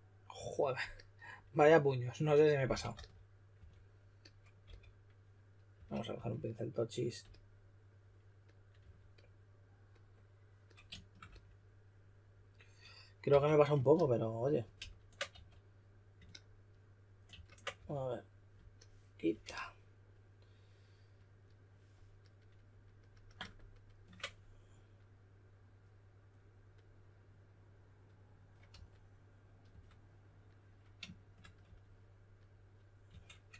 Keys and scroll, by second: 2.4-3.5 typing, 4.6 typing, 5.7 typing, 8.8 2, 13.2 w, 14.7 super+z, 15.3 q, 17.3 super+a, 17.7 w, 28.7-30.1 typing, 31.6 e, 32.8-33.5 typing.